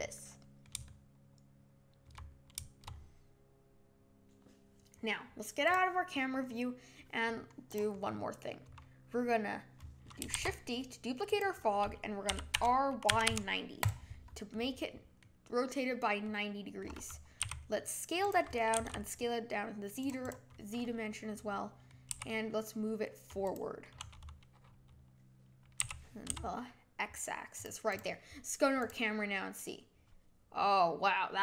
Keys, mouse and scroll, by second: 5.6 click, 6.0-7.2 middle drag, 7.2 scroll down 2, 7.7 click, 7.9-8.6 scroll down 3, 8.6 scroll up 1, 10.3 shift+d, 12.3 r, 14.5-17.4 middle drag, 17.4 s, 18.7 s, 20.2 click, 20.7-22.1 middle drag, 22.1 g, 23.5 click, 25.8 g, 27.9 drag, 28.7 click.